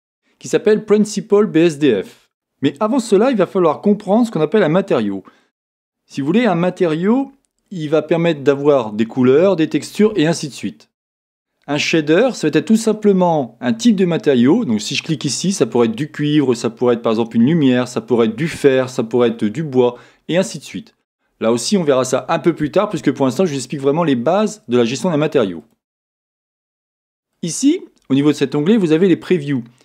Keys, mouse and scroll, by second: 14.8-25.7 drag, 27.3-28.4 drag.